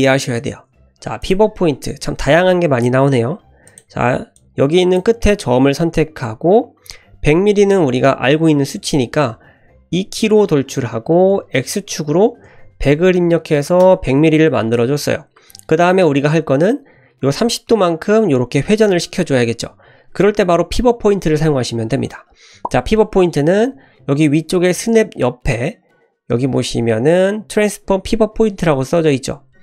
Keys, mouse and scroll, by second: 1.2 click, 3.7 click, 4.4 click, 9.9 e.